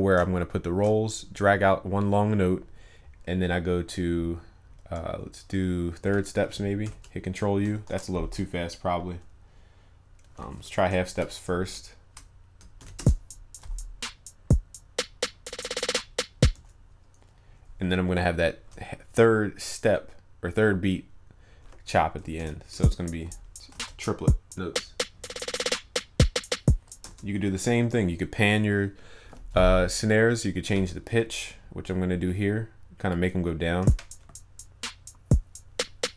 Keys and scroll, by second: 6.8 ctrl+u, 7.9 ctrl+z, 12.8 ctrl+u, 22.3 ctrl+u, 23.7 ctrl+s.